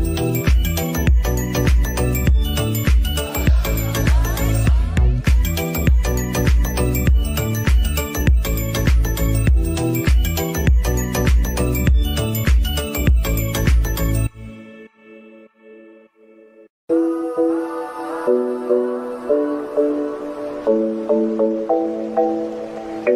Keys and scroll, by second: 8.4 g.